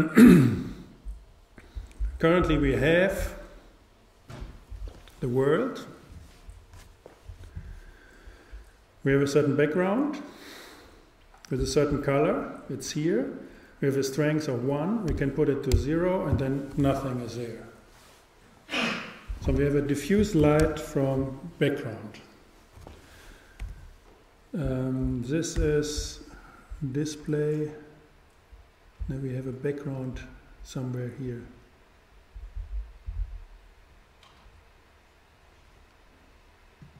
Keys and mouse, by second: 15.8 click, 19.6-21.4 drag, 23.7 n, 25.6 n, 29.9-31.7 drag, 36.8-36.9 drag.